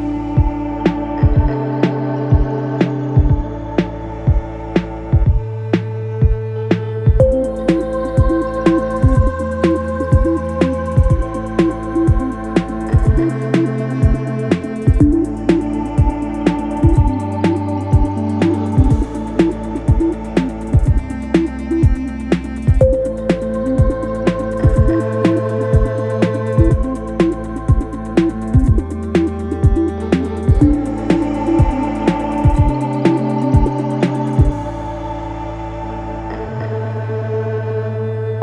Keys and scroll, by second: 7.8 1, 7.8 Return, 31.1 2, 31.4 ], 32.1 Delete, 32.9 ], 33.3 ctrl+d, 33.5 Escape.